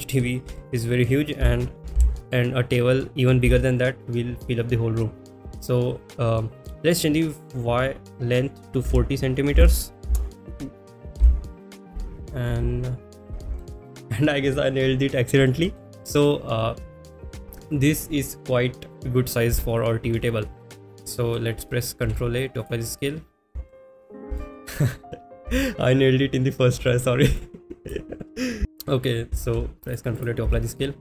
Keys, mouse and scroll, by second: 0.5 shift+middle click, 6.9-10.1 drag, 11.3 n, 11.5 middle click, 12.6 KP_1, 13.6 shift+middle drag, 13.9 click, 13.9 s, 13.9 z, 15.4-15.7 middle drag, 16.0-17.2 middle drag, 20.2 middle click, 20.8 KP_1, 21.1 middle drag, 23.2 ctrl+a, 23.7 shift+middle drag, 24.3 shift+middle drag, 25.4 KP_1, 26.9 shift+middle drag, 27.4-27.9 drag, 28.6 z, 30.5 ctrl+shift+a, 30.5 shift+middle click.